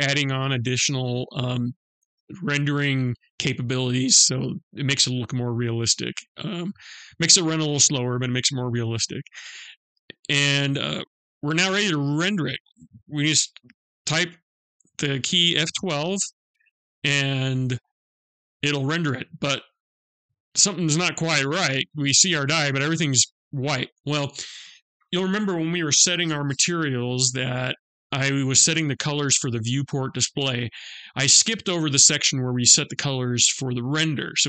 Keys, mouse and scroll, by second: 10.0-10.6 scroll down 1, 10.6-14.7 scroll down 1, 16.8 F12.